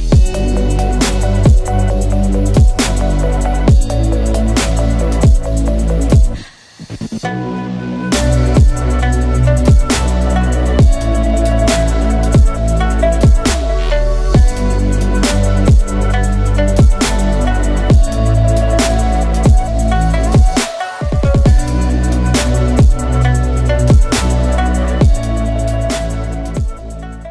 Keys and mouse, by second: 9.8-15.4 shift+middle drag, 16.1 shift+middle click, 16.5 middle click, 20.4-20.9 shift+middle drag, 21.5 shift+middle drag, 22.4-23.2 shift+middle drag, 23.6 shift+middle click, 24.1-25.1 middle drag, 25.3-25.8 shift+middle drag, 26.0 middle click.